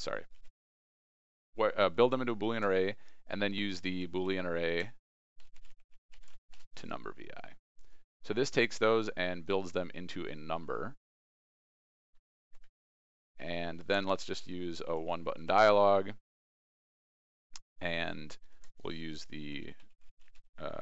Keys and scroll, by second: 0.3 ctrl+b, 2.3 ctrl+space, 13.7 ctrl+space, 18.6 ctrl+space.